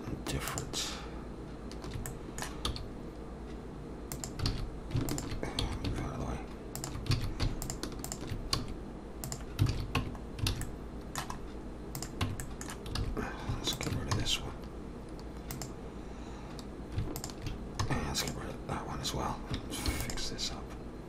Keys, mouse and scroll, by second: 2.0 alt+shift+click, 2.1 middle click, 2.7 s, 4.5 alt+a, 5.1 alt+shift+click, 5.6 s, 7.1 alt+a, 7.6 alt+shift+click, 8.1 alt+shift+click, 8.6 s, 9.7 alt+a, 10.0 Tab, 10.2 scroll down 2, 10.5 alt+a, 10.6 middle click, 11.4-12.0 scroll up 2, 12.0 click, 12.2 Tab, 12.4 middle click, 13.0 alt+a, 13.7 alt+shift+click, 14.1 x, 17.2 alt+shift+click, 17.8 x, 19.9 ctrl+r.